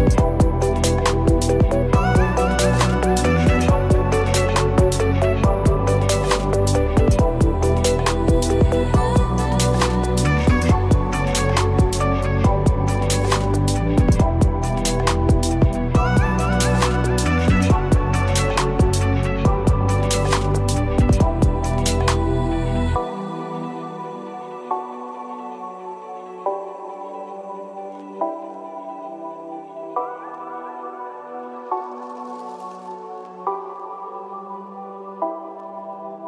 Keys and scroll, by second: 4.3 ctrl+z.